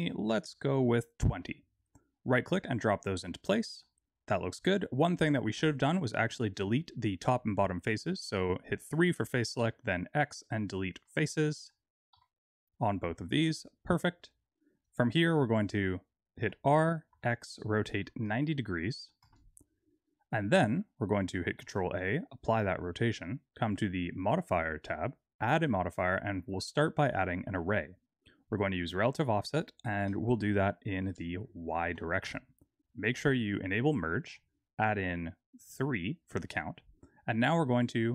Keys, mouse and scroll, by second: 3.1 middle click, 5.6 3, 5.9 click, 9.5 x, 11.0 middle click, 11.4 click, 12.1 x, 13.2 Tab, 13.5 middle click, 14.3-15.7 scroll down 1, 15.7-16.3 scroll down 2, 16.3 r, 20.5 middle click, 21.5 ctrl+a, 24.1 click, 25.3 click, 29.2 click, 30.9 click, 34.1 click, 35.5 click.